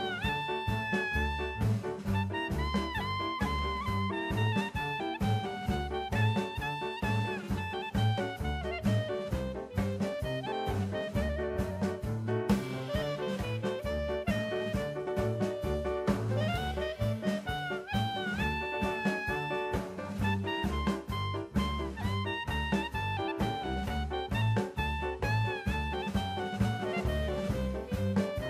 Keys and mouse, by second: 0.2 click, 0.9-1.3 drag, 1.4 drag, 2.1-3.1 drag, 5.7-6.4 drag, 8.2-13.1 drag, 14.8-15.8 shift+middle drag, 16.2 middle click, 17.1-20.4 drag, 22.5 click, 23.6-26.8 drag, 27.3-28.4 drag.